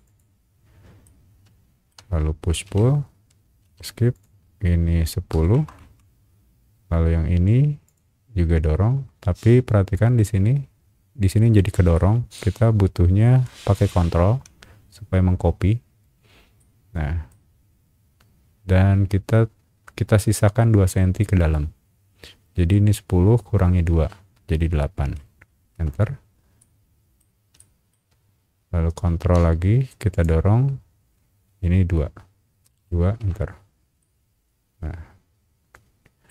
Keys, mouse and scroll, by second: 0.0 click, 0.6 middle click, 0.6-1.0 scroll up 2, 1.0 middle click, 2.6 p, 3.6 Escape, 4.1 click, 5.3 KP_1, 5.8 KP_Enter, 6.6-7.0 scroll up 2, 7.8 click, 9.4 middle click, 9.4 scroll down 1, 11.9 shift+middle click, 16.6 ctrl+middle click, 25.1 KP_8, 25.7 KP_Enter, 26.6 middle click, 27.6 shift+middle click, 28.3 middle click, 28.3 scroll up 1, 30.1 click, 32.8 KP_2, 33.2 KP_Enter, 34.0-36.3 middle drag.